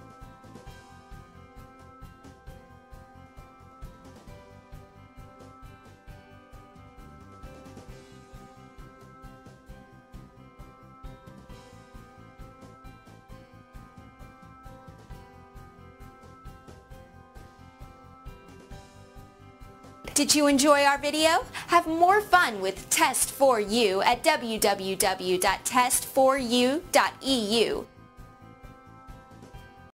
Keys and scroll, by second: 9.1 Tab, 10.5 Tab.